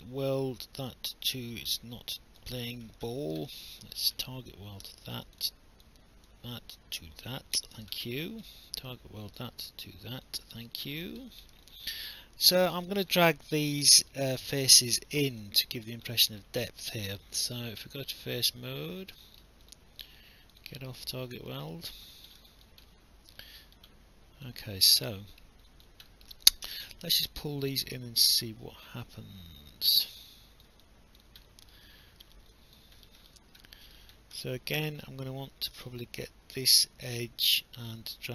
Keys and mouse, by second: 3.5 alt+middle click, 5.3 click, 8.0 alt+middle click, 9.2 click, 10.7 alt+click, 11.7 alt+click, 13.9 alt+middle click, 14.5 alt+click, 15.4 alt+click, 16.1 alt+middle click, 16.7 alt+click, 17.5 right click, 19.7 click, 21.5 shift+click, 22.5 alt+click, 22.9 alt+middle click, 24.5 alt+click, 25.1 alt+middle click, 25.7 alt+click, 26.1 alt+middle click, 26.7 w, 27.9 click, 30.8 alt+click, 31.9 alt+middle click, 32.6 alt+click, 33.7 alt+middle click.